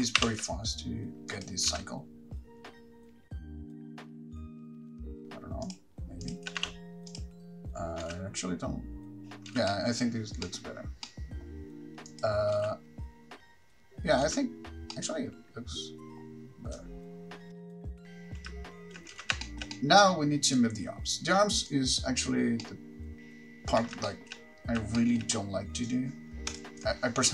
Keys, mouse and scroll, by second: 0.0 shift+r, 0.4 shift+r, 1.5 click, 1.9 space, 3.2 middle click, 3.2-5.2 typing, 3.4 shift+middle click, 3.4 click, 3.5 click, 3.5 scroll up 8, 3.6 click, 3.7 middle click, 3.7 click, 3.8 right click, 3.8 shift+click, 3.9 click, 3.9 middle click, 4.1 middle click, 4.2 middle click, 4.2 click, 4.2 scroll down 3, 4.3 click, 4.3 middle click, 4.4 click, 4.5 middle click, 4.6 shift+middle click, 4.6 click, 4.8 shift+middle click, 4.8 click, 4.9 middle click, 5.0 shift+middle click, 5.1 shift+middle click, 5.1 right click, 5.2 shift+click, 5.2-5.9 scroll up 5, 5.9 click, 6.4 shift+click, 6.9 g, 7.4 click, 8.2 space, 9.7 space, 9.9 middle click, 10.3-10.6 scroll down 3, 10.6 middle click, 11.2 middle click, 12.3 click, 12.7 space, 14.4 space, 17.0 middle click, 17.0 click, 17.0-17.5 scroll down 6, 17.5 scroll up 8, 17.5-17.9 typing, 17.6 click, 17.6 middle click, 17.7 scroll down 7, 17.7 middle click, 17.8 middle click, 17.9 shift+middle click, 17.9 click, 19.4 space, 19.7 shift+middle click, 19.9 middle click, 20.8 click, 21.9 click, 22.9 middle click, 24.3 shift+middle click, 25.2 shift+middle click, 26.3 r, 26.8 ctrl+click.